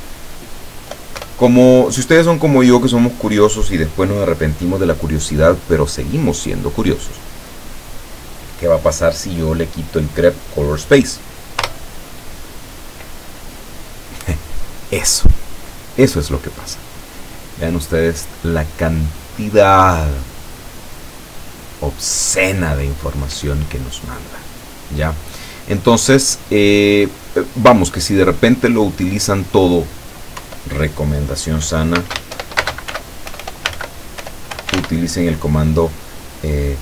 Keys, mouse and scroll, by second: 0.0 BackSpace, 11.7 Return, 17.7-21.6 drag, 21.6-22.1 scroll up 1, 22.1-23.4 scroll down 7, 24.8 click, 25.3-25.9 scroll down 2, 28.3-29.7 drag, 30.4 Up, 32.0-35.2 typing.